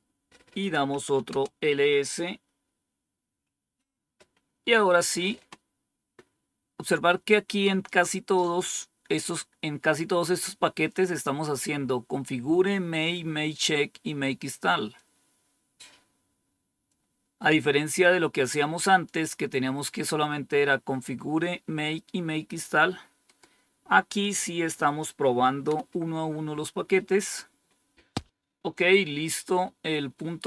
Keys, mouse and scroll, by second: 0.6-1.3 typing, 6.7-7.5 scroll down 1, 7.5-7.8 scroll down 1, 7.8-8.5 scroll up 1, 14.9-16.8 drag, 18.8 click, 24.1 click, 25.6 Return, 29.3-29.9 scroll up 2, 29.9 scroll down 2.